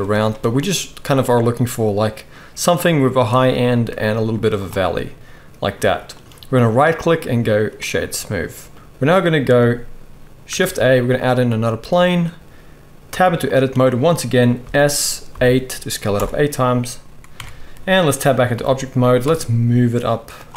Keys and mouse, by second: 4.3 z, 6.7-9.0 middle drag, 6.7-7.9 right drag, 10.6 shift+a, 11.6-13.6 middle drag, 13.1 Tab, 14.6 s, 17.3 Tab, 17.3-17.8 drag, 17.3-20.4 middle drag, 17.3-17.8 right drag, 18.5 g, 20.4-20.5 right drag.